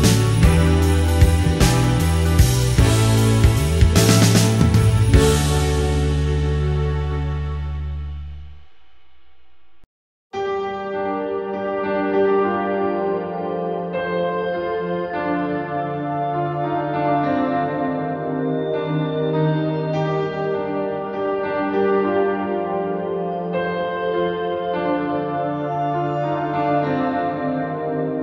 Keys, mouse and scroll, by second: 2.6 click, 3.1 x, 4.9 click, 5.6 click, 6.4 g, 7.6 click, 8.8 g, 9.4 click, 10.4 r, 11.0 click, 11.5 click, 11.7 g, 12.4 click, 13.9 click, 14.4 g, 15.4 click, 16.0 click, 16.6 click, 17.3 shift+middle click, 18.6 click, 19.4 click, 19.7 g, 20.2 click, 20.7 click, 21.0 g, 21.7 click, 21.9 click, 22.6 click, 23.2 g, 24.0 click, 26.0 x, 28.1 click.